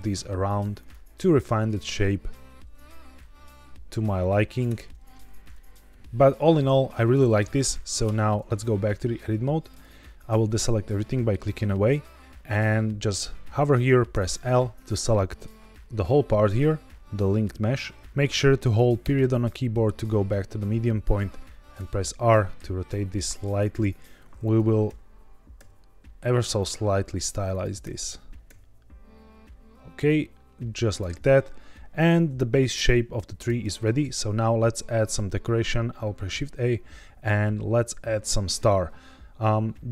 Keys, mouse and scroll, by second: 0.7 click, 1.8 scroll down 2, 3.0 g, 3.1 z, 4.4 click, 4.6 Tab, 5.4-6.8 middle drag, 7.3 KP_1, 8.0 Tab, 8.4-8.7 scroll up 2, 8.9 shift+middle click, 9.6 click, 14.0 l, 18.0 Escape, 21.7 r, 23.6 click, 24.3 click, 24.8 l, 25.5 r, 26.5 click, 27.4 click, 27.8 l, 28.4 r, 30.8 click, 33.3 Tab, 33.7-34.1 middle drag, 34.2 z, 34.7-35.9 scroll down 2, 36.1 shift+a.